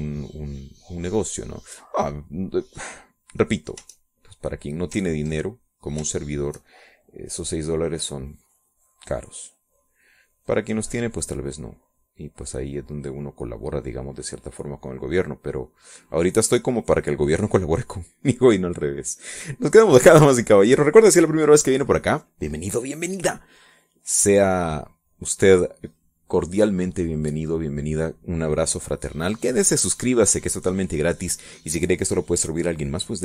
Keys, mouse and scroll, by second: 2.9-5.2 drag, 6.6 ctrl+click, 7.7 shift+click, 8.3-19.5 shift+drag, 20.4-21.4 drag, 25.3-26.3 drag, 26.4 click, 27.3-29.3 drag.